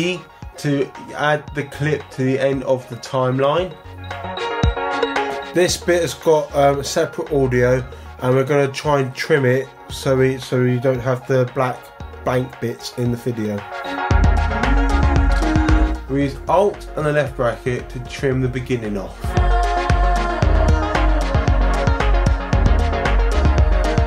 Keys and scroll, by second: 17.3 alt+[.